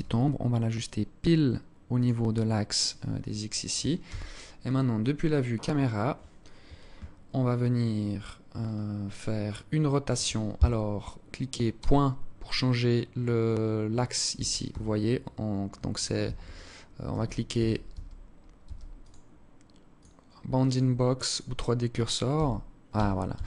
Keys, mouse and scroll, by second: 2.7 scroll down 7, 3.6 KP_0, 4.8 right click, 11.3 ., 13.9 ., 14.3 ,, 15.9-18.2 typing, 18.6 click, 20.3 click, 21.9-23.4 typing.